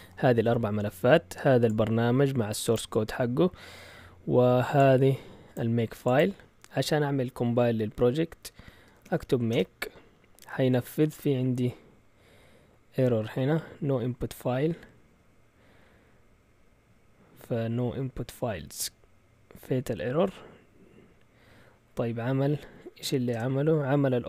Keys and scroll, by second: 8.6-9.6 typing, 23.0-23.8 typing.